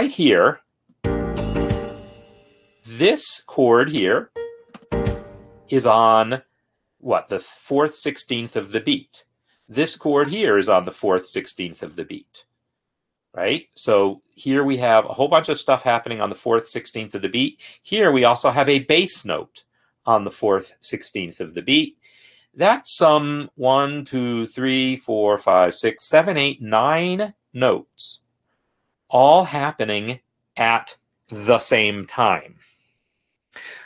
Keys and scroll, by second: 1.0 space, 4.9 space, 14.3 shift+Down, 14.9 shift+Down, 17.6 shift+Down.